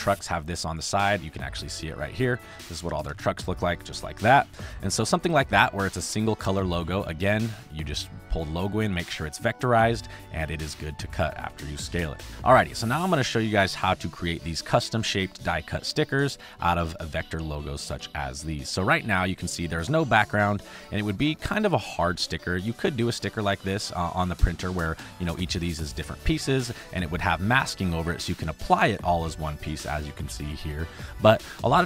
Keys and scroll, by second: 3.0 space, 12.3 space, 13.1 space, 14.4 space, 15.9 space, 17.6 space, 21.4 space, 31.4 space.